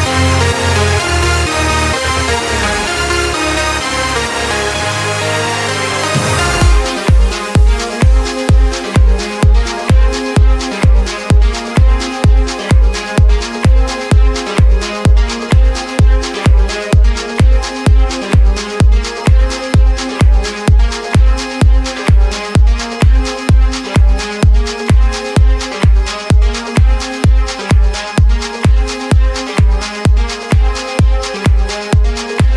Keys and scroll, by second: 1.0 space, 1.4 z, 2.3 ctrl+z, 3.1 space, 3.5 z, 5.7 z, 7.3 x, 9.4 space, 12.0 space, 12.5 z, 12.9 ctrl+space, 13.1 ctrl+space, 13.2 z, 14.3 x, 15.8 x, 17.4 space, 17.9 ctrl+0, 23.0 ctrl+space, 23.4 ctrl+space, 24.2 ctrl+0, 28.8 ctrl+z, 29.6 ctrl+z.